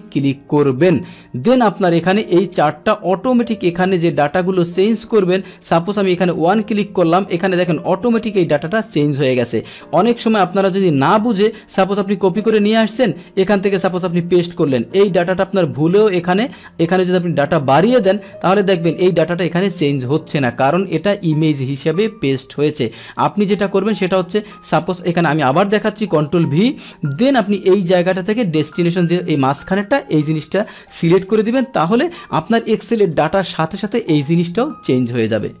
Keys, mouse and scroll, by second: 1.7 click, 3.9 alt+Tab, 5.1 click, 6.4 click, 6.8 alt+Tab, 7.6 click, 9.8 click, 10.9 Delete, 12.5 click, 13.9 click, 14.7 click, 15.7 alt+Tab, 16.9 click, 17.9 click, 18.4 alt+Tab, 18.9 alt+Tab, 21.0 click, 22.7 click, 24.8 click, 25.3 Delete, 26.1 ctrl+v, 27.5 click, 31.9 click, 33.1-35.6 drag.